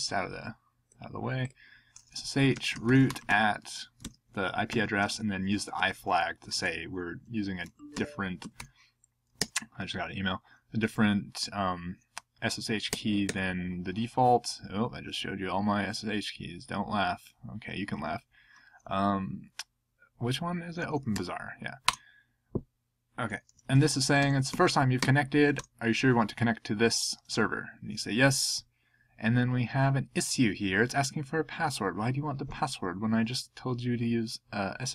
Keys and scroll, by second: 2.5-6.1 typing, 7.6-9.0 typing, 9.4 Tab, 12.9 Tab, 13.2 Tab, 20.6-21.5 typing, 24.2-25.0 typing, 25.6 Return.